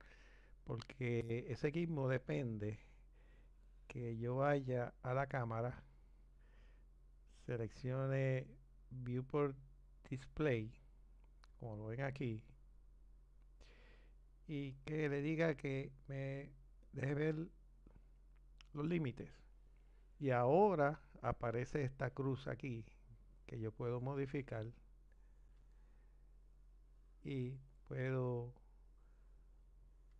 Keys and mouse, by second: 16.8 click, 22.9 click.